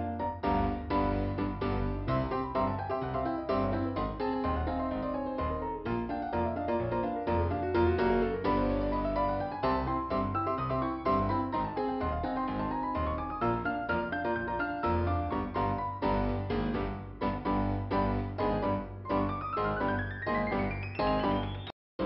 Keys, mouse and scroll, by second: 4.8 scroll down 2, 6.4 click, 7.6 click, 8.7 click, 10.1 click, 11.6 click, 17.2 scroll up 2, 18.4 click, 21.4 scroll down 1.